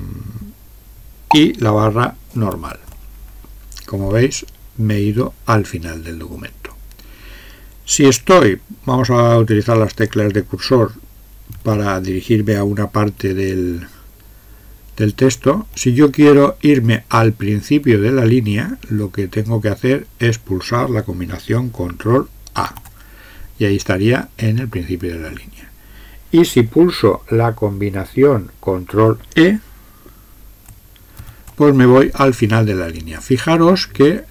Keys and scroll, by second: 2.3 alt+/, 9.8 Up, 13.1 Up, 13.8 Right, 14.3 Right, 22.7 ctrl+a, 31.2 ctrl+e.